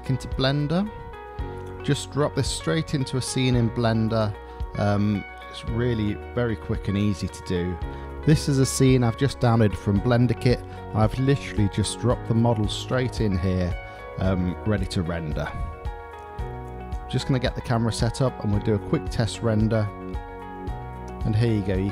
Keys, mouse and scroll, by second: 0.0 shift+middle drag, 0.3 shift+click, 1.5-2.1 shift+middle drag, 2.9-5.5 middle drag, 11.1-11.7 shift+middle drag, 15.8-17.4 middle drag, 18.3-18.9 middle drag.